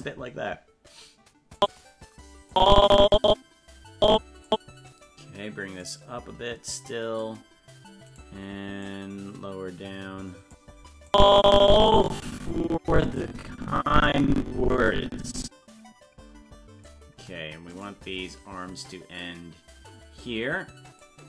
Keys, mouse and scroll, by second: 1.6 click, 2.5-4.5 drag, 5.8-7.2 drag, 8.2 right click, 8.8-10.5 drag, 11.1-16.9 drag, 17.8 right click, 18.8-21.0 drag.